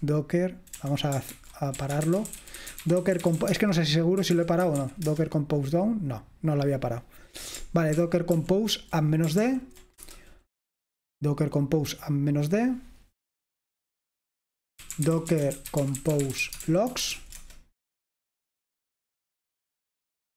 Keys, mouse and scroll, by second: 1.4 ctrl+c, 1.8-5.3 typing, 8.1 ctrl+p, 8.4 ctrl+p, 9.5 ctrl+p, 10.1 Return, 14.7-17.7 typing.